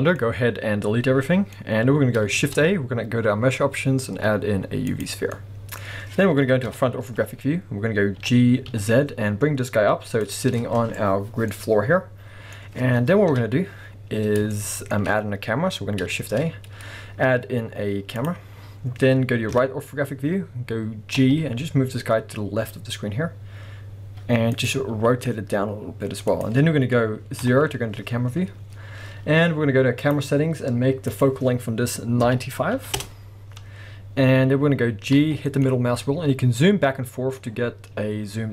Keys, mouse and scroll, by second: 2.4 shift+a, 5.8-6.7 scroll up 2, 6.7 KP_1, 7.4-8.2 scroll up 2, 8.2 g, 10.3 click, 10.5 scroll up 1, 10.8-24.6 middle drag, 11.0-11.5 scroll down 1, 12.6-13.3 scroll up 1, 13.3 KP_1, 14.0 scroll up 1, 16.2 shift+a, 18.5-19.5 scroll down 2, 19.5 KP_3, 20.2-20.8 scroll down 2, 20.8 scroll up 2, 21.1 g, 24.6 click, 24.9 r, 26.4 click, 27.4 KP_0, 30.0 click, 31.1-38.5 drag, 33.0 Return, 35.1 g.